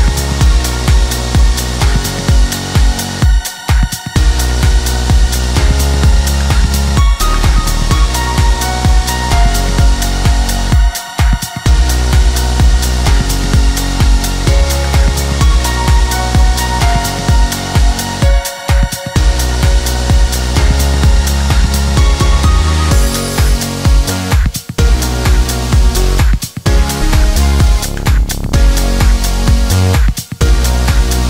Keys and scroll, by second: 29.5 Escape.